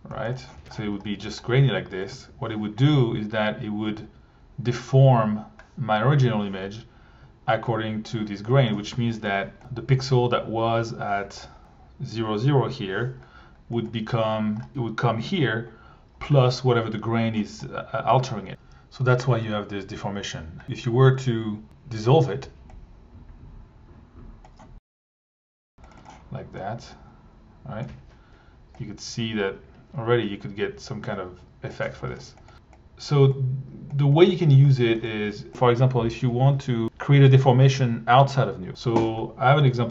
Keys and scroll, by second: 2.1 1, 9.2 1, 11.6 1, 13.9 1, 20.4 alt+1, 20.9 alt+1, 22.4 Tab, 22.6-23.6 typing, 23.7 Return, 35.5 shift+Delete.